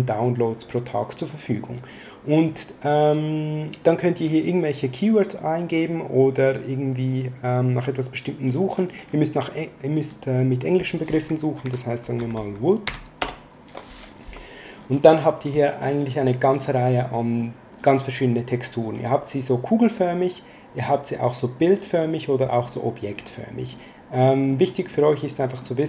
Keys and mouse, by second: 4.1 click, 9.9 click, 11.6 w, 12.1 o, 13.1 Return.